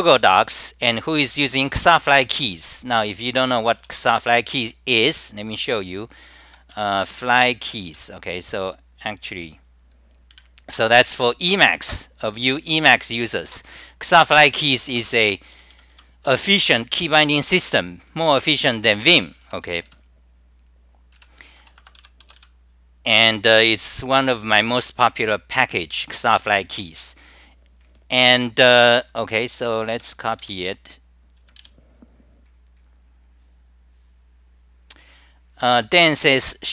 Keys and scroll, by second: 3.6-4.4 typing, 6.3-7.7 typing, 29.5-30.2 typing.